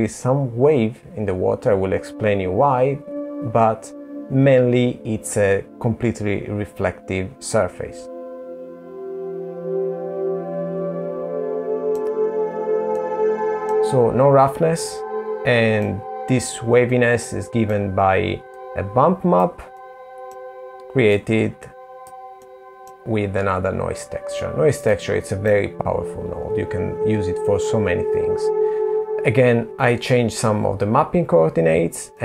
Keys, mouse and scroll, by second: 11.1 middle click, 13.0 middle click, 15.4 middle click, 16.7 click, 17.9 middle click, 19.4 click, 20.6 middle click, 21.4-22.4 scroll up 4, 23.1 middle click, 24.7-25.4 scroll down 3, 25.4-25.8 scroll down 3, 30.4 middle click, 31.4-32.0 scroll up 5, 32.0 middle click.